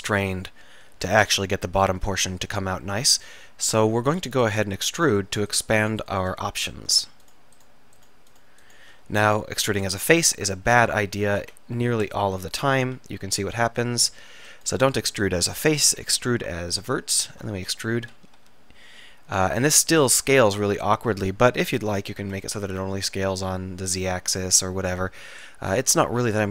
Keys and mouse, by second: 5.7 shift+click, 6.5-8.8 drag, 9.2 click, 9.8 KP_1, 11.5 KP_7, 12.3 KP_3, 13.1 e, 14.9 ctrl+z, 17.6 ctrl+z, 17.7 w, 18.5 e.